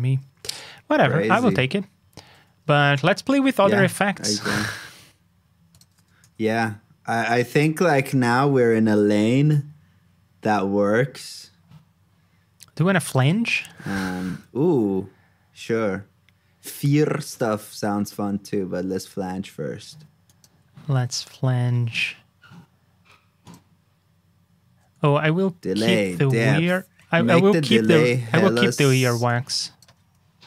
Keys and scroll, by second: 2.2 super+s, 2.6 super+Tab, 6.2 shift+super+t, 14.4 super+c, 17.9 super+c, 18.4 super+Tab, 20.8 super+v, 25.0 super+z, 26.2 shift+super+z, 27.3 super+z, 28.3 shift+super+z.